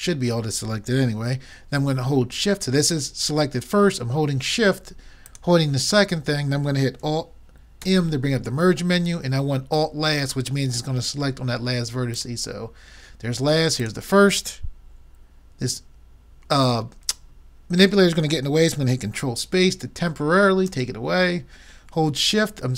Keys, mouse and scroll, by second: 5.3-7.2 drag, 7.8 alt+m, 13.8-15.5 drag, 20.7 ctrl+space.